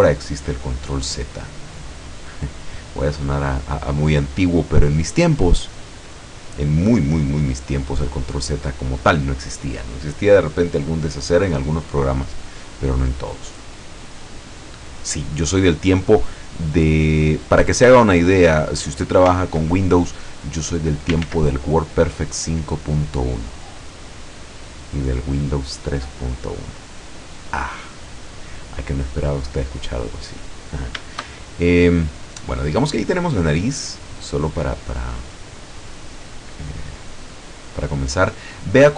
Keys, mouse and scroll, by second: 2.4 click, 3.1-4.6 middle drag, 4.7 scroll up 2, 5.3 scroll down 2, 6.1 scroll down 2, 7.1-8.6 middle drag, 8.8 scroll up 2, 9.3 scroll up 2, 12.3-16.2 middle drag, 17.2 click, 18.0 click, 18.4 scroll up 1, 18.6-19.8 middle drag, 19.8-21.3 ctrl+drag, 21.3 ctrl+z, 21.8-25.1 ctrl+drag, 26.1 click, 27.6-29.9 middle drag, 30.0 scroll up 2, 30.5 scroll down 2, 31.5 shift+scroll down 2, 32.1-34.3 middle drag, 35.0 click, 36.1 click, 36.6-38.9 middle drag.